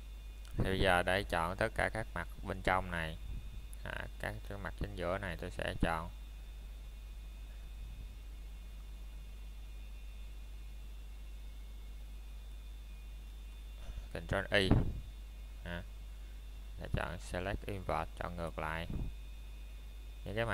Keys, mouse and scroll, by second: 0.0-0.5 scroll up 1, 1.6 middle click, 2.0 scroll up 1, 4.6 middle click, 5.2-6.3 scroll up 1, 7.5 scroll down 1, 8.7 middle click, 9.1-9.5 scroll up 1, 9.5 middle click, 9.9-10.5 scroll up 1, 11.1 middle click, 11.7 scroll up 1, 12.2 middle click, 12.7 scroll down 1, 13.1 middle click, 14.2-14.9 scroll up 1, 15.3 middle click.